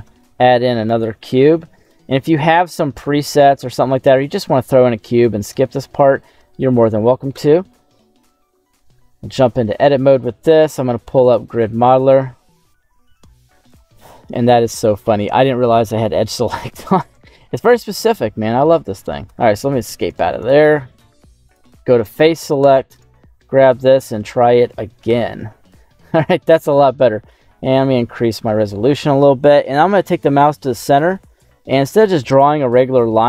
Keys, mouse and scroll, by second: 0.0 shift+a, 2.7 s, 4.0 click, 4.7 middle click, 5.5 shift+middle click, 5.8 shift+scroll down 1, 6.0-6.3 scroll up 2, 6.4 shift+middle click, 7.3 KP_7, 8.9 Tab, 10.4 q, 14.0 middle click, 16.7 middle click, 17.9 click, 18.9 right click, 19.2 Tab, 19.5 Escape, 19.7 Escape, 19.8 Escape, 20.0 right click, 20.4 right click, 21.4 click, 21.9 middle click, 22.5 KP_7, 22.9 right click, 23.5 q, 25.9 scroll up 3, 26.7-27.2 scroll down 1.